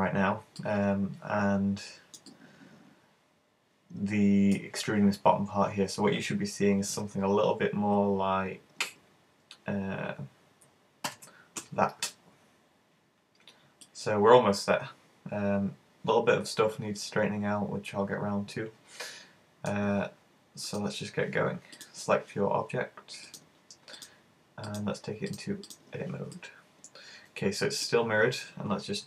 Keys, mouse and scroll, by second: 0.2-0.7 scroll down 2, 0.6 middle click, 2.3 middle click, 6.9 `, 11.1 alt+h, 12.2-12.8 scroll up 6, 13.8 middle click, 20.6 click, 21.8 right click, 23.3 click, 24.0 click, 24.7 click, 26.4 middle click.